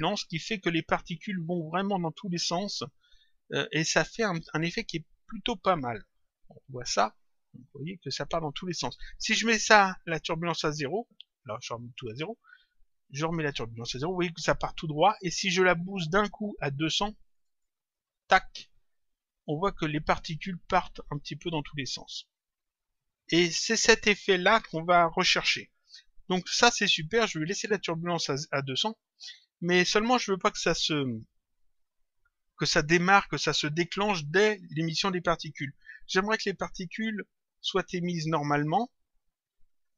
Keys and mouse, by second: 5.9 click, 9.7 click, 11.9 click, 16.0 click, 17.9 click, 24.4 click, 25.8 click, 27.2 click, 29.7 click.